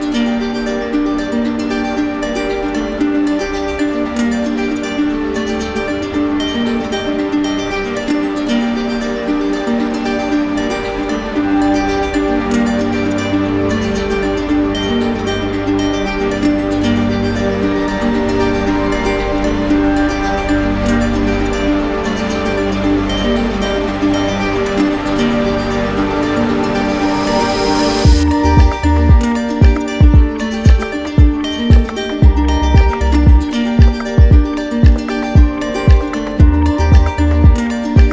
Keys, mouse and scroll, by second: 2.3 click, 3.0 click, 4.5 click, 4.8 shift+click, 5.6 alt+click, 7.1 click, 10.4-11.5 middle drag, 13.5-15.2 drag, 15.2 alt+middle click, 18.7 click, 19.4 ctrl+click, 21.3 ctrl+click, 21.8 ctrl+click, 27.4 click, 28.4 ctrl+click, 29.2 click, 30.2 ctrl+click, 30.6 ctrl+click, 35.4 click, 35.9 ctrl+click.